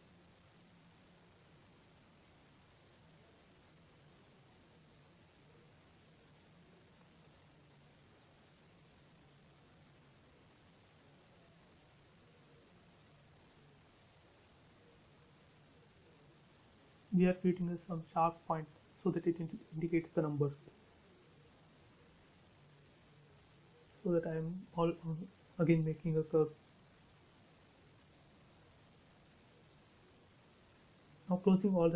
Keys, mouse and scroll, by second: 0.3 ctrl+z, 1.0 f, 2.3 click, 3.3-4.4 typing, 4.1 Return, 5.1 ctrl+z, 5.9 f, 6.8 click, 7.9-8.7 typing, 8.5 Return, 9.7-10.2 scroll up 1, 10.8 scroll down 1, 10.9 shift+middle click, 12.1 a, 13.3 click, 17.3 click, 19.3 click, 19.4 space, 20.8 click, 22.1 f, 22.9 click, 24.8-26.2 typing, 25.9 Return, 26.6 scroll up 1, 27.7 e, 28.0 click, 28.6 space, 28.7-29.2 scroll down 1, 30.0-30.5 scroll up 1, 31.2 l.